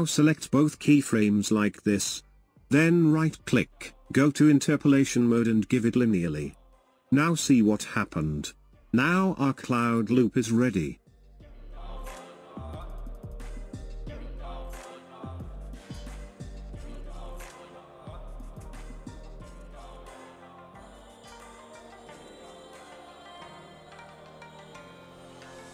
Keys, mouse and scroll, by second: 2.6-6.0 right drag, 8.5-9.7 drag, 9.7 space, 19.3-22.2 drag, 19.3-22.2 middle drag, 19.3-22.2 right drag.